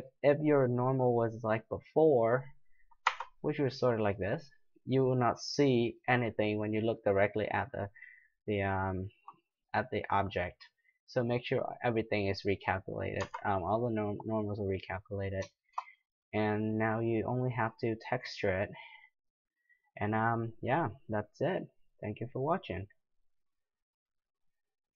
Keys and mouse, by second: 3.1 Tab, 4.1 click, 4.7-5.9 middle drag, 6.7 middle click, 7.0-9.2 middle drag, 11.1-13.2 drag, 13.2 Tab, 14.3 middle drag, 17.4-19.5 middle drag.